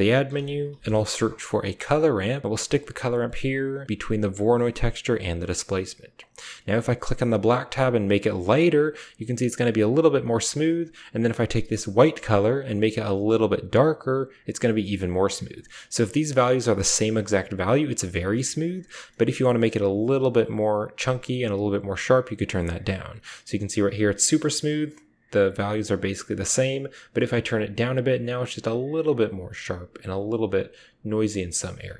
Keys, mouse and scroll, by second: 3.6-4.7 typing, 4.0 click, 4.5 click, 5.3 drag, 12.3 click.